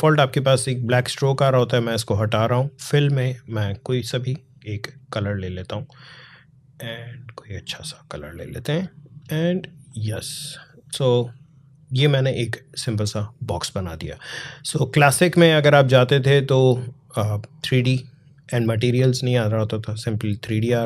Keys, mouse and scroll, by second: 4.7 click, 7.5-14.3 drag, 14.6 click.